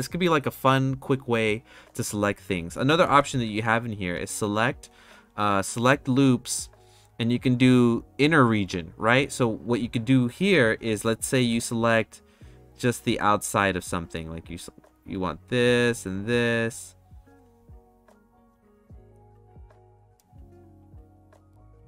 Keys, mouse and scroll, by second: 3.0 ctrl+z, 4.3-9.1 drag, 10.7 2, 11.1 click, 12.4-13.8 shift+drag, 14.5 shift+click, 16.6-18.4 shift+drag, 18.8 shift+click, 19.3 shift+click, 20.4 shift+click, 21.7 shift+click.